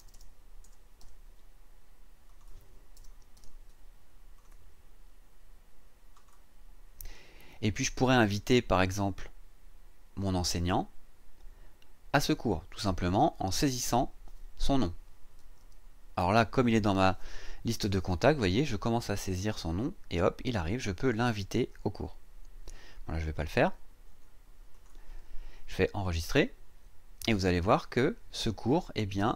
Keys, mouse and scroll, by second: 0.0 BackSpace, 0.6 KP_0, 1.0 KP_7, 2.3 click, 2.9 BackSpace, 3.3 KP_8, 4.3 click, 6.1 click, 8.8 click, 15.1-16.1 typing, 24.0 BackSpace, 24.7 click, 26.1 click.